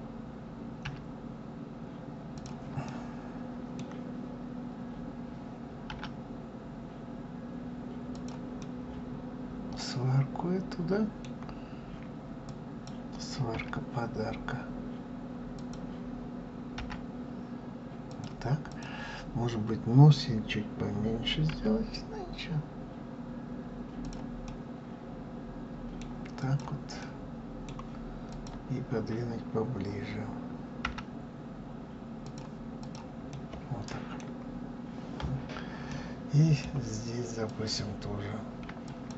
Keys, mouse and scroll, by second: 2.6-5.6 middle drag, 5.6 r, 8.3-11.3 middle drag, 12.2 click, 13.2 s, 18.4 click, 21.2 s, 24.1-26.1 middle drag, 26.1 click, 26.7-28.0 middle drag, 28.0 click, 30.6 g, 32.5 click, 33.0-33.9 middle drag, 33.9-34.9 scroll down 4, 34.9-35.6 scroll up 2, 35.6-37.2 middle drag, 37.2 click, 38.6 click.